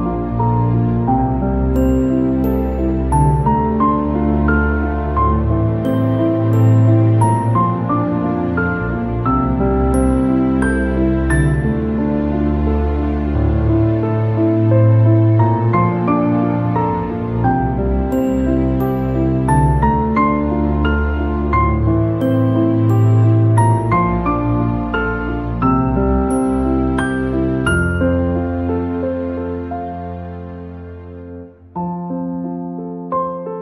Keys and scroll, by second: 7.8 ctrl+-.